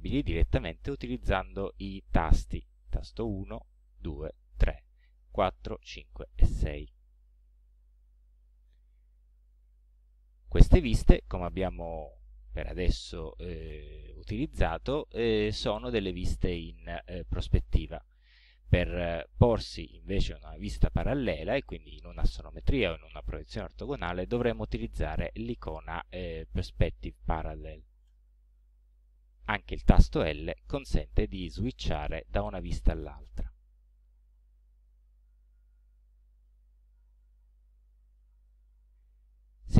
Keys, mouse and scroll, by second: 3.4-6.4 typing, 8.1 1, 9.6 middle click, 10.3 click, 10.5 scroll up 2, 28.1 click, 30.5 l, 31.6 l, 35.1-35.8 scroll down 4, 36.5 right click.